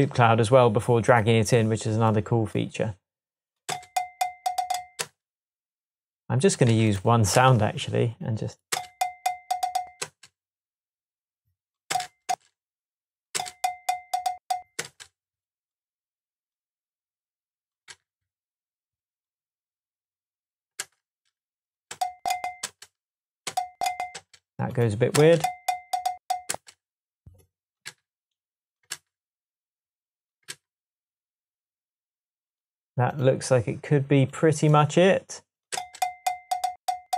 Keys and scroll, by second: 3.7 space, 5.0 space, 6.7 super+c, 7.4 super+v, 8.7 space, 10.0 space, 11.9 space, 20.8 v, 21.9 space, 23.5-24.2 space, 25.2 space, 26.5 space, 27.9 super+c, 28.9 super+v, 30.5 v, 35.8 space.